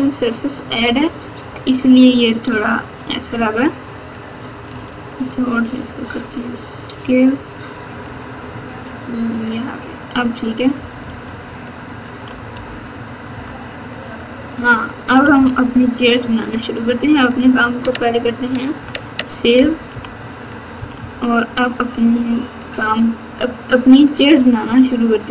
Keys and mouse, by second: 0.7 ctrl+r, 4.7 s, 9.3 Tab, 10.7 KP_Subtract, 11.0 KP_Subtract, 12.2 KP_4, 12.5 KP_4, 13.3 KP_8, 15.1 KP_Subtract, 15.3 KP_Subtract, 15.5 KP_Subtract, 18.8 ctrl+s, 19.9 KP_2, 20.7 KP_6, 20.9 KP_6, 22.0 KP_8.